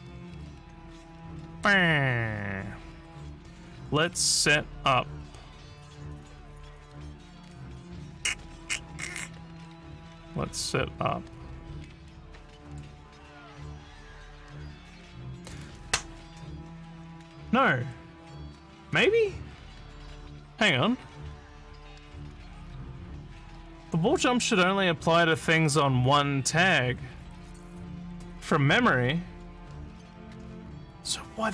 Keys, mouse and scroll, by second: 1.5 click, 12.6 click.